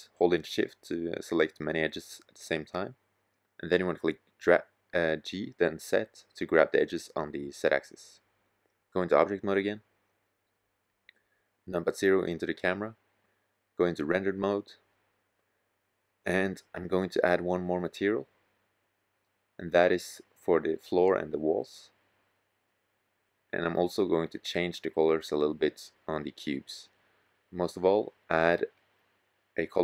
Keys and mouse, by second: 0.2-3.4 drag, 3.4 g, 6.3-9.8 drag, 10.6 KP_0, 12.4-14.0 drag, 21.4-24.4 drag, 28.5-29.8 drag.